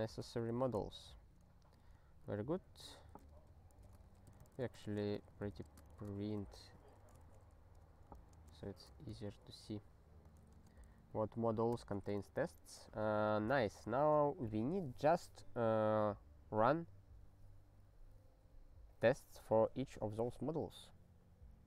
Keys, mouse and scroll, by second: 0.0 alt+;, 0.5 ctrl+s, 1.0 ctrl+n, 2.2 Return, 2.3 ctrl+p, 2.6 ctrl+p, 3.1 ctrl+f, 3.3 ctrl+f, 3.8-7.2 typing, 7.2 alt+shift+s, 8.1 ctrl+f, 8.4 space, 8.7 ctrl+e, 13.5 click, 14.0 ctrl+s, 18.0-18.7 scroll up 2.